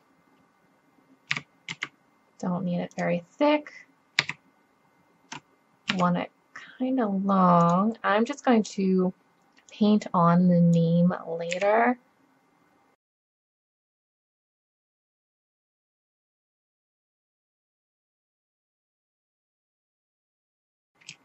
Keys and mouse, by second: 1.4 s, 4.2 s, 9.5 middle click, 10.0-11.6 drag, 11.6 s, 15.1-15.7 middle drag, 16.4-17.8 middle drag, 17.8 click, 18.6 middle click, 19.1 click, 20.1 KP_1.